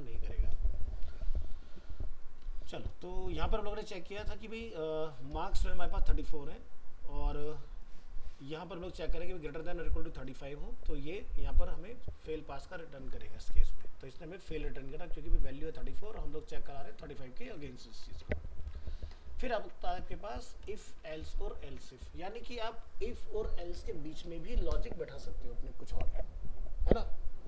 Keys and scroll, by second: 13.7 ctrl+s, 17.9 ctrl+s, 18.7 alt+Tab, 20.9 alt+f, 21.0 alt+移.